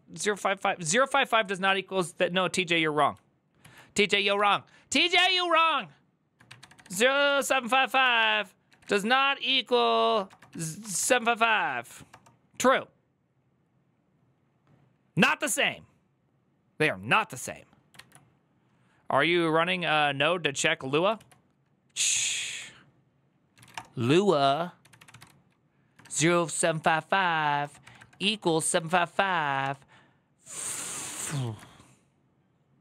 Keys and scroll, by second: 3.4 alt+{, 3.9 ctrl+a, 4.1-11.3 typing, 11.9 Return, 21.0 alt+{, 21.9 ctrl+c, 22.0 ctrl+c, 22.1 ctrl+c, 23.1-29.4 typing, 29.4 Return, 31.0-31.7 typing.